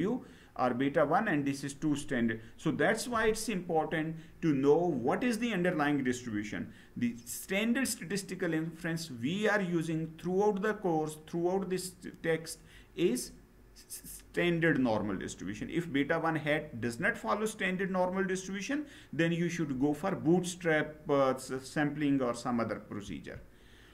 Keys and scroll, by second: 22.8 Down.